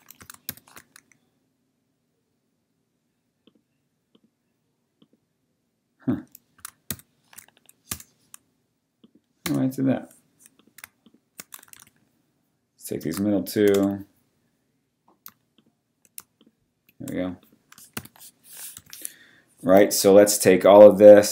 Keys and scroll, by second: 0.5 alt+shift+super+c, 6.9 alt+shift+super+c, 7.9 BackSpace, 9.4 BackSpace, 11.9 super+d, 13.7 Return, 18.0 v, 18.7 t, 19.7 typing.